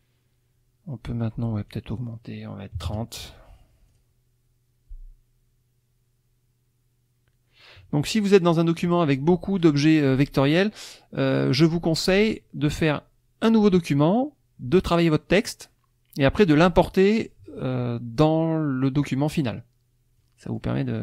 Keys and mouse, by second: 1.7 click, 2.7 KP_3, 2.9 KP_0, 3.9 click, 19.0 click, 20.2-20.7 drag.